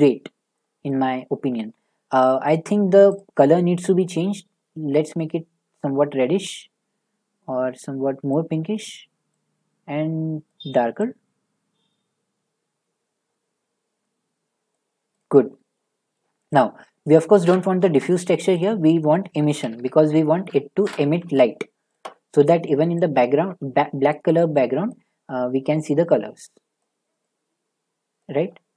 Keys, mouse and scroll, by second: 0.9-1.4 scroll, 3.1 click, 8.3 click, 10.5 click, 15.2 click, 16.2 shift+middle click, 16.6 click, 17.4 Delete, 17.8 a, 18.6 click, 19.3-20.3 typing, 20.9 Return, 21.9 click, 24.1 click, 24.9 click, 26.8 click, 28.2 click.